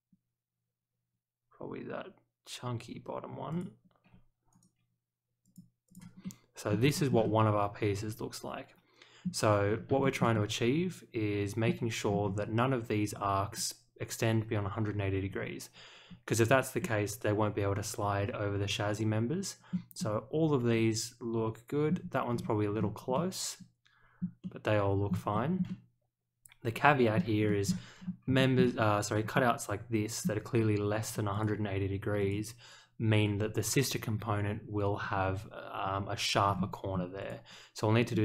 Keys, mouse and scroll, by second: 3.5 ctrl+click, 4.5 right click, 5.4 click, 5.8 click, 6.2-6.7 middle drag, 6.9 shift+middle click, 7.2-9.2 middle drag, 10.0 shift+middle click, 10.3-11.6 middle drag, 12.0 scroll down 1, 16.0 scroll up 1, 16.8-19.7 middle drag, 19.9-21.8 middle drag, 22.3 scroll down 1, 22.7-23.1 scroll up 1, 23.1-24.1 middle drag, 24.4-25.0 middle drag, 25.3 shift+middle drag, 25.6-27.1 middle drag, 27.4 shift+middle click, 27.9 scroll down 1, 28.3 shift+middle click, 28.6-29.2 scroll down 1, 29.3 middle click, 31.3 click, 32.2 click, 36.5-37.2 scroll up 1, 37.2 click, 38.1-38.2 middle drag.